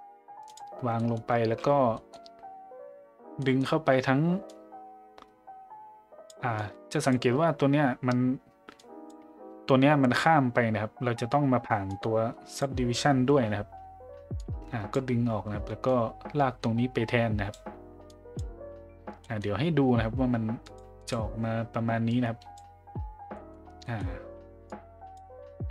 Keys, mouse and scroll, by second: 0.9 middle click, 1.9 middle click, 3.4 middle click, 4.5-6.3 drag, 6.6-7.2 drag, 8.8 click, 11.9 click, 14.4-14.9 drag, 15.9-17.5 drag, 18.1 click, 19.2 middle click, 20.6 click, 21.0 click, 22.2-22.5 drag, 23.3 middle click, 23.9 middle click, 24.7-25.1 drag.